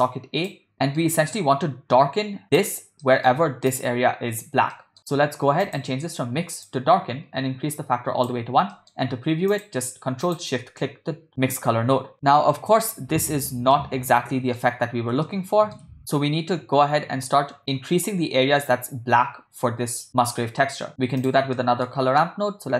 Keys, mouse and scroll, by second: 0.7 middle click, 2.4 click, 3.0 middle click, 3.7 click, 4.7 middle click, 5.7-6.7 drag, 7.8-8.3 drag, 8.7 middle click, 9.5 click, 10.5 ctrl+shift+click, 12.1 ctrl+middle click, 13.9-14.6 shift+middle drag, 15.4 shift+middle click, 21.2 click, 21.6 middle click.